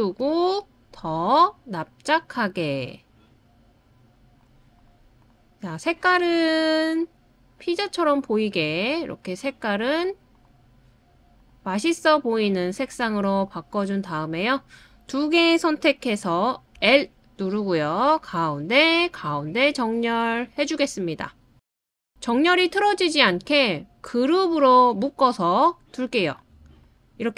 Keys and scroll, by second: 16.8 l.